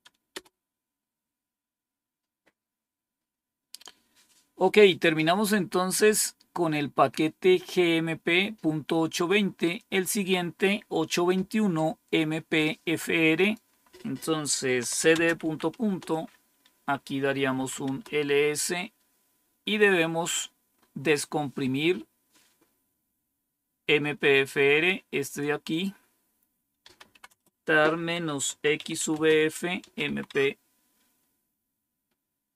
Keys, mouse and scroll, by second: 0.2 Return, 5.6-7.0 scroll down 3, 7.0 scroll down 1, 9.7 click, 13.3 click, 14.5-15.9 typing, 17.3-17.9 typing, 20.7-21.8 scroll up 1, 21.8-24.3 scroll up 1, 24.3-25.4 drag, 25.6 click, 26.5-30.5 typing.